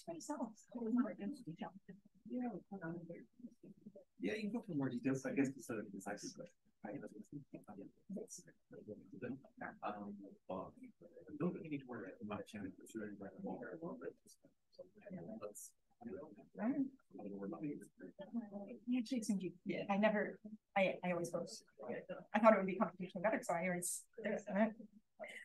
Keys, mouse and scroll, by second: 17.3-17.8 scroll up 1, 17.8-18.9 scroll up 1, 18.0-18.9 drag, 18.9-19.8 scroll up 1, 19.8-24.8 scroll up 1.